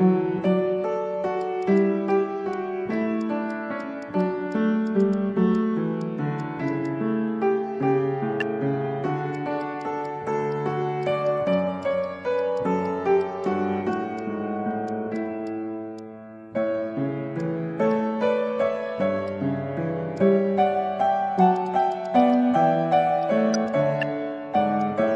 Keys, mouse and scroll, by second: 0.1 alt+middle click, 0.6 Tab, 1.0 Tab, 1.0 middle click, 1.1 Tab, 1.4 alt+click, 2.1 alt+click, 2.5 alt+click, 4.2 alt+click, 4.8 alt+click, 5.5 alt+click, 6.7 alt+click, 8.6 Tab, 8.7 middle click, 9.3 alt+click, 9.8 alt+click, 11.0 alt+click, 12.2 alt+click, 12.6 alt+click, 14.2 alt+click, 14.7 alt+middle click, 14.7 click, 15.6 scroll down 1, 17.4 alt+click, 17.9 shift+click, 19.3 alt+click, 19.5 alt+middle click, 21.4 alt+click, 21.5 alt+click, 21.6 alt+click, 22.2 alt+click, 22.3 alt+click, 23.6 Tab, 24.3 Tab, 24.3 scroll up 1, 24.8 alt+click, 24.9 alt+middle click.